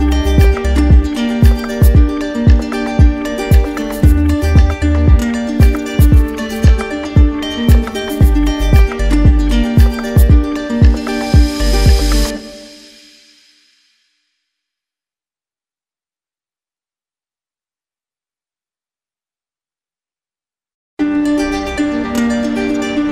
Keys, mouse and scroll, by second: 1.1 alt+right click, 2.1 alt+right click, 2.6 alt+right click, 3.8 alt+right click, 4.0 ctrl+click, 4.6 q, 6.2 right click, 7.5 ctrl+click, 10.8 ctrl+click, 10.9 ctrl+click, 11.4 r, 16.4 alt+click, 16.7 ctrl+z, 19.0 alt+click, 23.0 click.